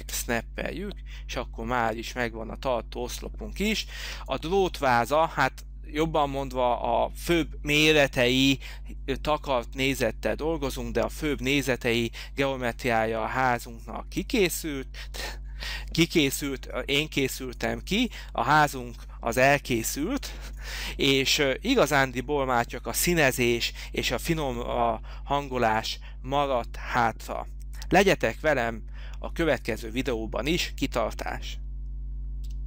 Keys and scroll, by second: 0.1 space, 3.8 h.